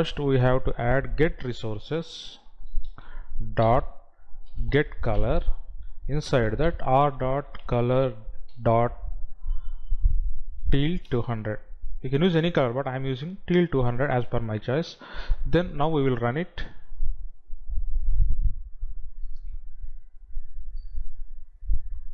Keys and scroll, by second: 10.7 Down.